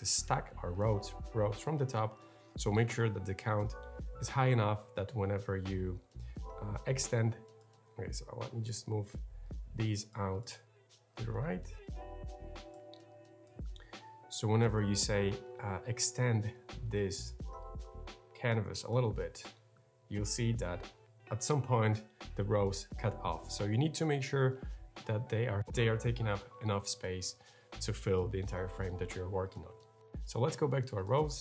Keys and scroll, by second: 7.5 super+space, 7.6 super+z, 23.2 super+z, 25.5 super+z.